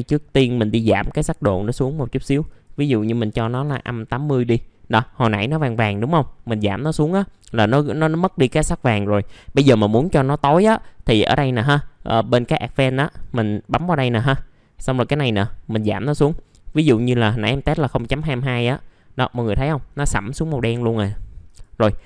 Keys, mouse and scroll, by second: 0.8 click, 3.3 KP_8, 4.7 middle click, 13.1 click, 16.9 KP_0, 17.1 KP_Decimal, 17.6 KP_2, 19.1 middle click, 19.6-20.0 scroll up 1, 20.8 middle click, 21.0-21.4 scroll down 1, 21.4 click.